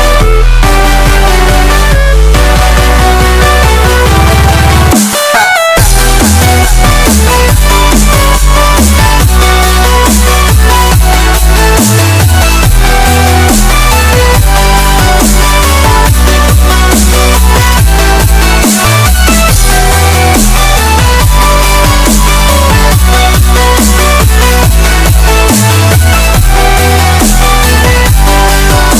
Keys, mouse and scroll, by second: 0.0 scroll down 1, 0.3 scroll up 1, 1.0 click, 3.2 click, 4.2 scroll down 1, 4.4 click, 4.8 scroll up 1, 4.9 click, 6.3 Delete, 6.9 scroll down 1, 10.2-10.7 scroll up 1, 10.7 click, 13.7-15.0 drag, 15.0-15.6 scroll up 1, 15.6-16.2 scroll down 1, 16.9 click, 20.9 s, 21.9-23.6 drag, 23.6-24.5 scroll down 1, 24.9 click, 25.0-25.6 scroll up 1, 25.6-26.5 scroll down 1, 26.6-27.5 scroll up 1, 28.6 click.